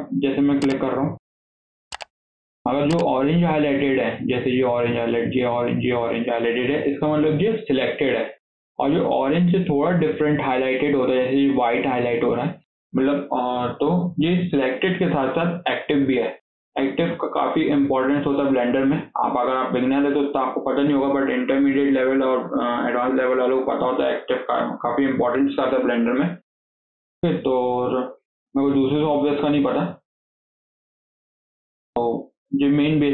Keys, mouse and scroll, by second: 0.0 shift+click, 0.6 shift+drag, 1.0 shift+click, 1.4-1.8 shift+middle drag, 1.8-2.6 scroll up 1, 2.6-5.6 middle drag, 26.4 KP_7, 27.1 scroll down 3, 27.3-27.7 shift+middle drag, 27.7-28.0 scroll down 1, 28.0 click, 28.2-29.2 scroll down 1, 29.2 scroll down 1, 29.3 scroll up 1, 29.6-31.2 shift+middle drag, 31.2 scroll down 1, 31.4-33.1 shift+middle drag.